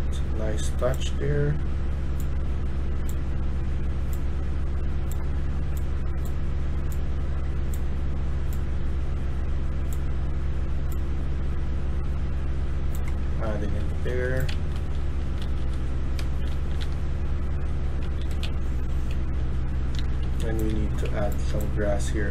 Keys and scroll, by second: 13.0-20.9 typing, 13.9 Escape.